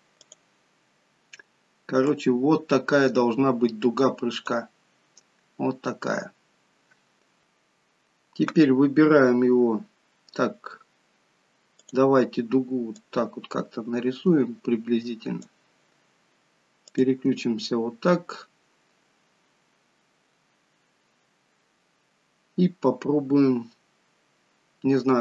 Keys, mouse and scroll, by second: 0.4 click, 6.6-7.4 scroll up 1, 7.4 click, 11.8 click, 13.0 click, 17.0 click.